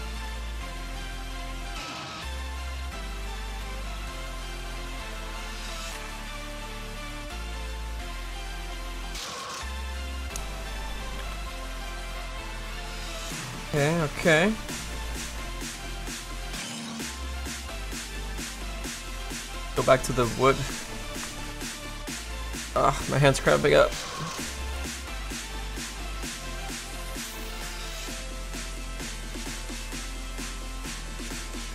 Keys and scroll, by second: 16.0 x.